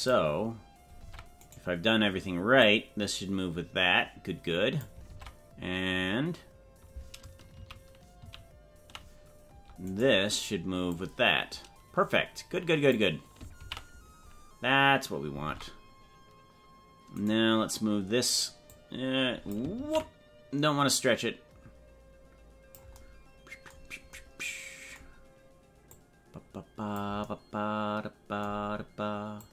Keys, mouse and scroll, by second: 0.0 click, 1.0 ctrl+Tab, 1.5 right click, 2.6-4.8 drag, 5.2 ctrl+Tab, 7.8 ctrl+z, 8.4 ctrl+z, 10.0 right click, 11.0-13.0 drag, 13.8 ctrl+z, 15.6 ctrl+Tab, 17.2 right click, 18.8 click, 20.0 ctrl+z, 20.9-22.7 drag, 25.9-27.0 drag, 29.4 click.